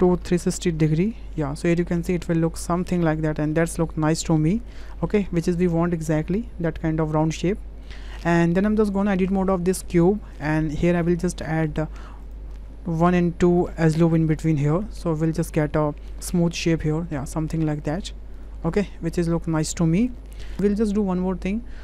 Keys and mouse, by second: 2.1-4.6 middle drag, 4.9 shift+middle click, 8.1 shift+middle click, 9.0 shift+middle click, 9.8 Tab, 11.4 click, 12.2 click, 14.4 click, 18.3 click, 18.7 click, 19.1 Tab, 19.6-20.3 drag.